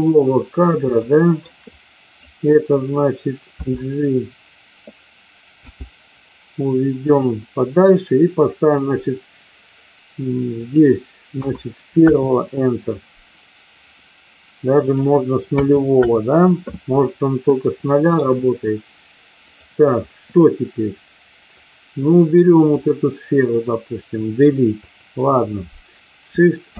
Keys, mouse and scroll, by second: 1.0 shift+middle click, 1.7 click, 3.6 d, 5.7 g, 10.6-12.4 drag, 14.8-16.1 drag, 17.7 shift+middle click, 22.5 click, 24.8 Delete, 26.7 shift+a.